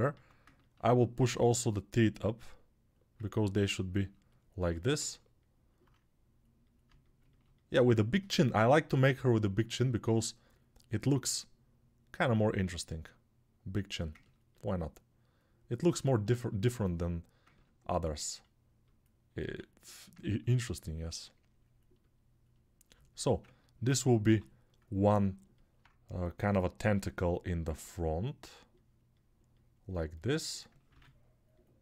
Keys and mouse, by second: 0.1 alt+q, 4.2-14.1 alt+right drag, 5.0 alt+q, 14.1-23.4 alt+drag, 19.4 alt+q, 23.4-31.8 alt+right drag, 24.0 g, 30.7 ctrl+r.